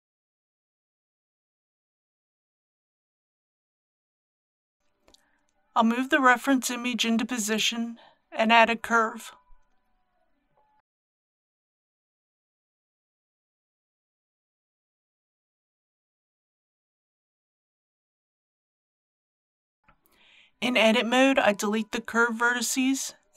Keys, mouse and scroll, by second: 0.1 scroll down 1, 5.2 g, 5.5 z, 7.1 click, 7.5 shift+middle click, 9.1 shift+a, 10.6 click, 12.2 KP_3, 12.4 g, 12.5 y, 13.0 click, 14.2 KP_1, 20.5 Tab.